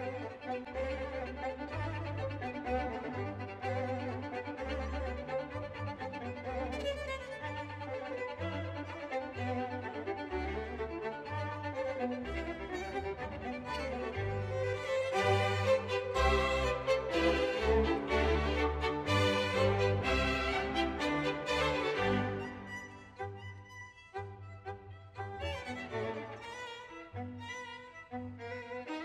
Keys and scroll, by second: 18.7-20.0 typing, 21.5 w.